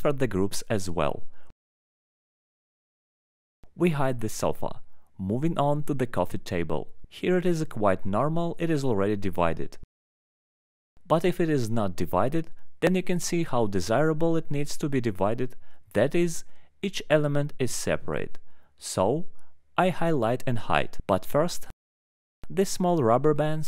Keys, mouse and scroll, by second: 1.2 click, 2.1 alt+middle click, 2.4 scroll, 3.0 click, 3.0-3.4 scroll down 2, 4.2 alt+middle click, 4.5 scroll down 1, 5.9 middle click, 8.5 ctrl+click, 9.1 alt+middle click, 10.7 right click, 10.9 click, 11.6 click, 13.2 alt+middle click, 13.5 click, 14.2 alt+middle click, 14.7 ctrl+click, 15.6 ctrl+click, 16.6 ctrl+click, 17.4 alt+middle click, 18.5 ctrl+click, 19.6 alt+middle click, 20.8 click, 21.0 click, 21.8 alt+middle click, 22.3 click, 22.4 middle click, 23.0 scroll, 23.6 alt+middle click.